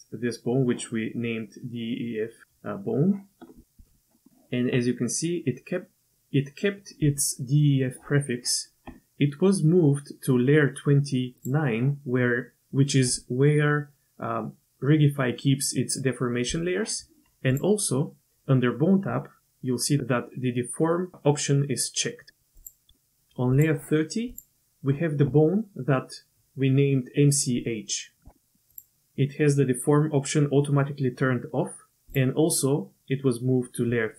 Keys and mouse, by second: 11.4 click, 17.5 click, 23.5 click, 28.7 click, 32.1-34.1 drag.